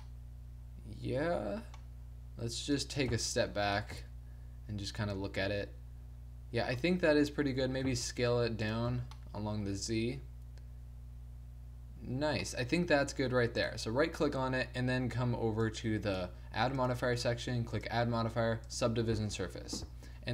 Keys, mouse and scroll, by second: 0.1 middle click, 3.2 click, 3.4 t, 3.8 middle click, 7.7 s, 9.0 a, 13.7-15.6 right drag, 15.6 click.